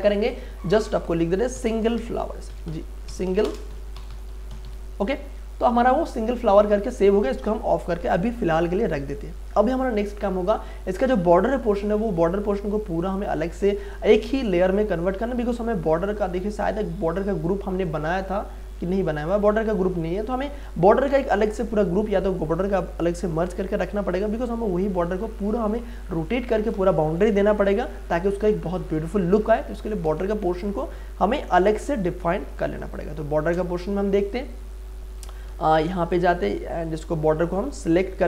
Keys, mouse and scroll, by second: 1.6-5.1 typing, 5.9 click, 11.3 click, 14.9-16.2 scroll down 1, 16.2 click, 30.2 space, 30.5-34.8 ctrl+drag, 35.2 ctrl+z, 36.0 click.